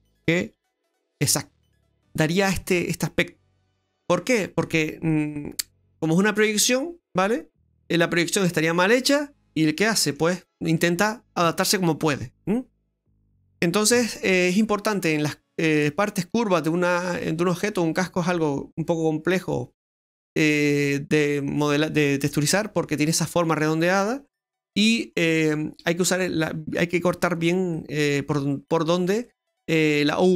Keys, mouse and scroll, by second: 0.4 g, 1.8 middle click, 5.1 middle click, 9.9 middle click, 14.0 ctrl+z, 15.2 middle click, 16.3 middle click, 17.3 middle click, 18.7 middle click, 23.2 middle click, 24.2 middle click, 27.7 middle click, 30.1 middle click.